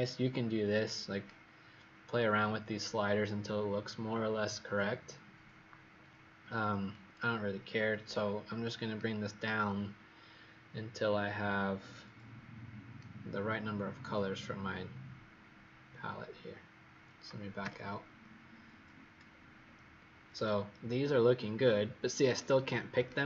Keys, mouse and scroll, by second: 17.5 ctrl+0, 19.2-19.9 alt+scroll up 2, 20.3 click, 22.3 click, 22.9 click.